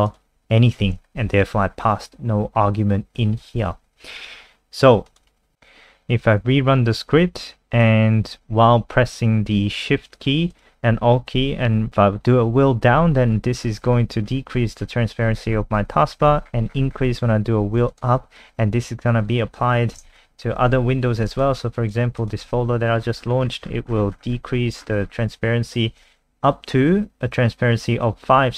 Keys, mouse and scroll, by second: 1.1 Right, 1.2 Left, 5.1 click, 5.6 ctrl+alt+r, 6.6 click, 20.2 F3, 20.9 F3, 21.4 click.